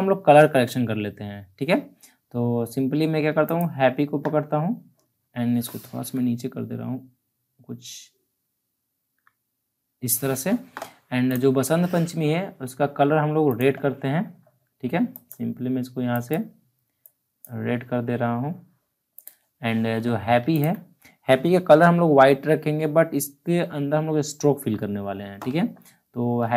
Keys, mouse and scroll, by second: 3.4 click, 8.7 Down, 11.2 click, 20.5 ctrl+click.